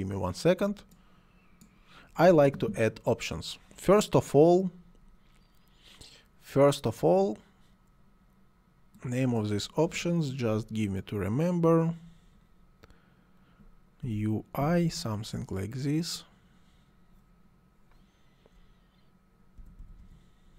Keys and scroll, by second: 14.0 u, 14.6 i, 19.6 BackSpace.